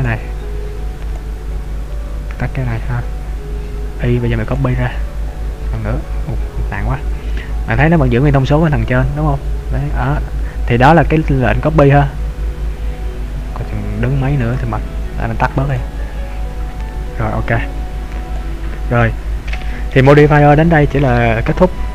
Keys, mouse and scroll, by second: 0.1 click, 1.4 click, 2.6-4.5 scroll down 1, 4.5 click, 6.1-6.6 scroll down 1, 6.6-7.3 scroll down 1, 7.3-7.8 scroll down 1, 7.8-8.3 scroll down 1, 12.7-14.1 scroll up 1, 14.1-14.8 scroll down 1, 14.8 click, 16.0 click, 16.6 scroll down 1, 16.8-18.3 scroll up 5, 18.3 click, 19.1 middle click.